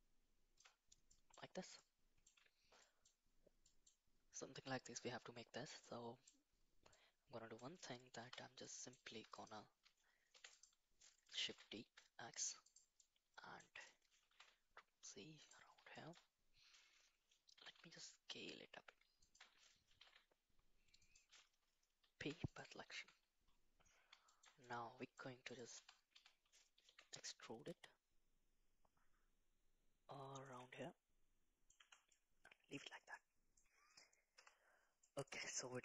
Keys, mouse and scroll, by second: 1.1 middle drag, 1.8-2.2 middle drag, 2.9 middle click, 3.6 middle click, 5.8-6.2 middle drag, 6.9-7.6 middle drag, 8.2 /, 8.6 middle drag, 9.1 Tab, 10.3 3, 10.5 click, 11.5 shift+d, 13.0 middle click, 14.2 g, 16.0 shift+middle click, 17.6 s, 19.9 g, 22.2 p, 22.9 Tab, 24.2 shift+middle click, 24.6 middle click, 25.5 click, 25.7 Tab, 26.1 a, 26.9 e, 30.8 middle click, 31.8 Tab, 32.1-32.7 middle drag, 33.1-33.6 middle drag, 34.3 /, 35.0 middle drag.